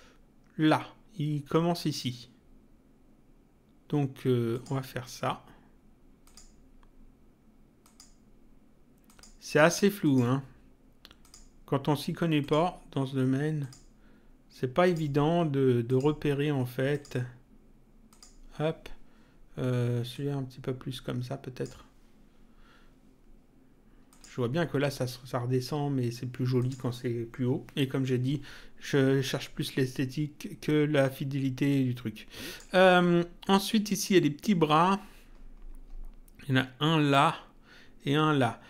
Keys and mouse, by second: 4.5 click, 6.2 click, 7.8 click, 9.1 click, 11.2 click, 12.4 click, 13.6 click, 14.8 click, 18.1 click, 20.1 click, 24.1 click, 26.6 click, 31.7 click.